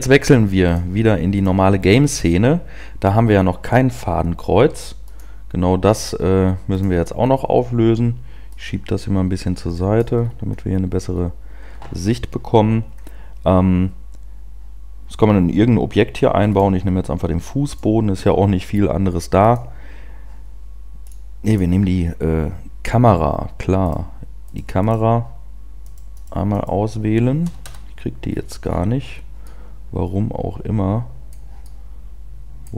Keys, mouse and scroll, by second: 1.5 click, 6.7 click, 6.8 click, 8.5 click, 10.2 scroll down 2, 11.3 scroll up 1, 11.5 scroll down 1, 13.4 scroll up 1, 21.7 click, 22.6-23.3 scroll down 1, 24.1 right click, 24.5 right click, 25.0 right click, 25.8 right click, 26.2 right click, 26.7 right click, 27.6 KP_0, 28.3-29.4 scroll down 10, 29.7 middle click, 31.5 middle click.